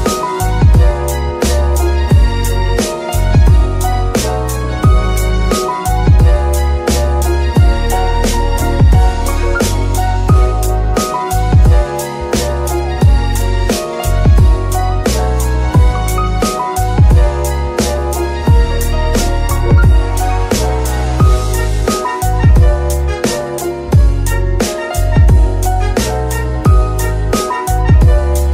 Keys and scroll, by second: 1.4 r, 2.9 Escape, 5.1 KP_1, 5.2 KP_Decimal, 5.4 KP_5, 5.5 Return, 7.0 r, 10.3 Escape, 14.2 g, 17.0 Escape, 28.2 Escape.